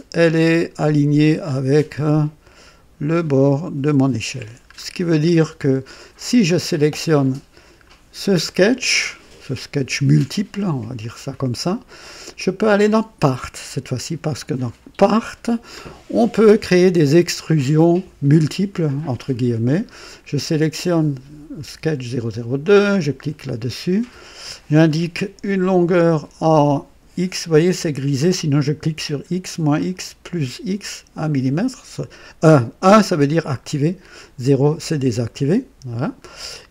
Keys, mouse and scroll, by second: 1.5 scroll up 2, 2.0 right click, 4.7-5.5 scroll down 4, 6.5 click, 7.8-8.1 scroll down 2, 12.0 click, 14.4 click, 23.2 click, 28.5 click, 29.8 click.